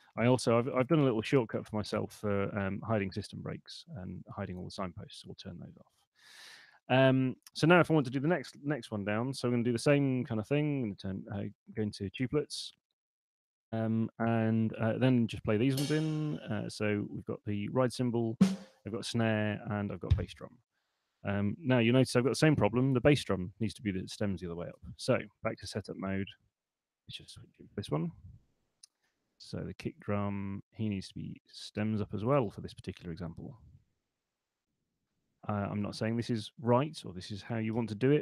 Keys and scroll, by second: 0.6 alt+x, 2.2 alt+super+s, 9.5 5, 10.6 3, 10.9 Return, 23.1 Escape, 24.7 BackSpace, 25.3 super+1, 33.7 super+2, 37.7 6.